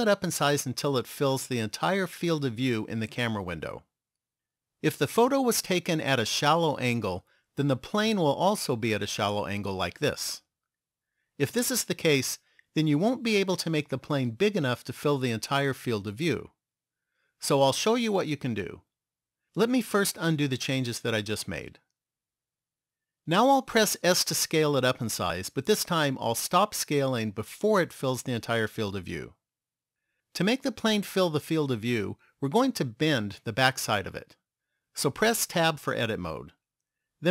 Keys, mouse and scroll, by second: 9.1 middle click, 13.1 s, 21.4 ctrl+z, 21.9 ctrl+z, 24.5 s, 35.6 Tab.